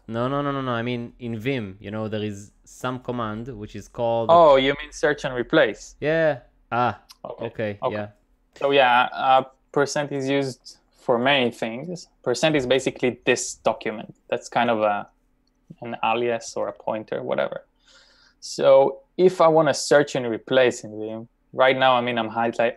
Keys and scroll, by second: 0.0 j, 2.8 typing.